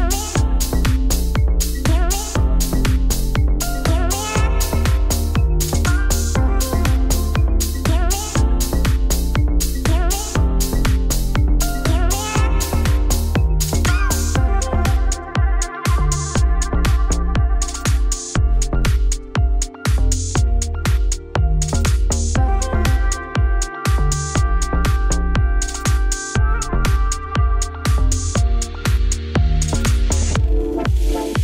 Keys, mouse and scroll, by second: 2.3-4.3 middle drag, 3.3 click, 4.3-7.7 alt+drag, 7.7 scroll down 6, 7.9 shift+middle click, 8.3 KP_Decimal, 8.5 scroll down 1, 8.7 middle click, 9.5 click, 11.6 click, 12.5 ctrl+z, 12.9 click, 13.2 g, 14.3 Tab, 15.2-15.6 scroll up 6, 15.9 middle click, 16.7 Tab, 19.3 click, 19.5-20.6 middle drag, 20.6 Tab, 20.7 a, 21.8 Tab, 26.1 scroll down 3, 29.2 Tab, 29.3 Tab, 29.7 middle click, 30.3 Tab, 30.4 a, 30.9 middle click, 31.1 scroll down 1, 31.1 2.